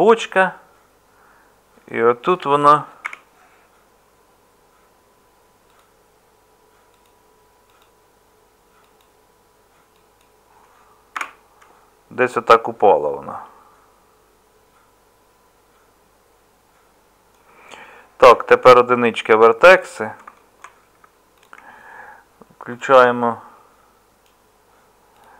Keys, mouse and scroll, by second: 3.1 k, 18.3 1.